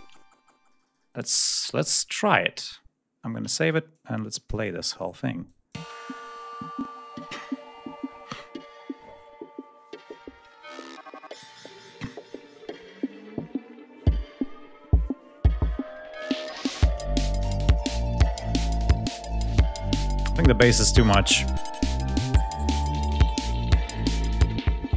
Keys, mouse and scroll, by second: 3.4 ctrl+s, 3.9-4.8 ctrl+drag, 5.4-5.8 drag, 5.7 space, 6.2 ctrl+scroll up 1, 13.2-14.4 ctrl+scroll down 5, 14.9 scroll down 2, 15.5 scroll up 2, 17.6-18.3 scroll down 4, 18.6-18.9 scroll down 2, 20.9 scroll down 2, 22.0 click, 23.4 click.